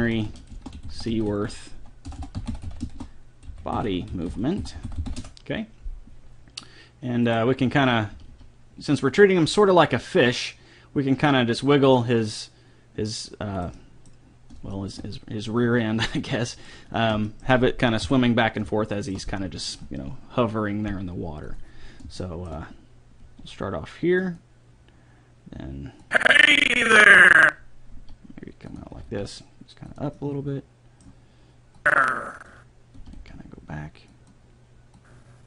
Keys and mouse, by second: 2.2 BackSpace, 7.3 right click, 8.1 r, 13.8-16.6 middle drag, 18.0 KP_7, 19.7-20.8 middle drag, 21.5-23.3 drag, 22.3 middle click, 23.3 r, 23.4 middle click, 26.1 click, 27.9 r, 28.9 r, 29.7 click, 31.8-33.6 drag, 33.0 r, 35.1 click.